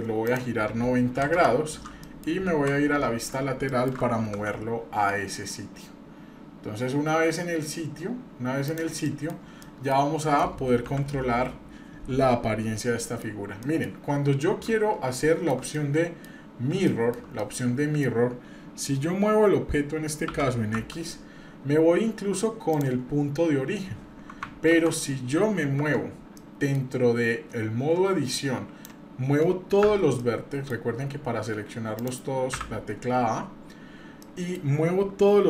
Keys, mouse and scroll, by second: 0.3-1.4 drag, 1.9 scroll down 1, 2.0 middle click, 2.5 KP_3, 3.7 shift+middle click, 4.2 g, 9.0-9.6 scroll down 2, 9.1 middle click, 9.6 middle click, 10.2 middle click, 10.8 KP_7, 13.0 middle click, 13.3 scroll up 1, 13.6 middle click, 14.1 scroll up 1, 15.1-15.6 shift+middle drag, 15.7-16.3 middle drag, 16.4 scroll up 1, 16.9-17.2 shift+middle drag, 17.4 middle click, 20.3 g, 23.1 scroll up 1, 24.7 ctrl+z, 25.8 Tab, 26.4 middle click, 28.3 click, 29.8 a, 30.2 middle click, 31.1 scroll up 1, 32.0 click, 32.5 a, 33.8-34.2 scroll down 1, 34.2 middle click.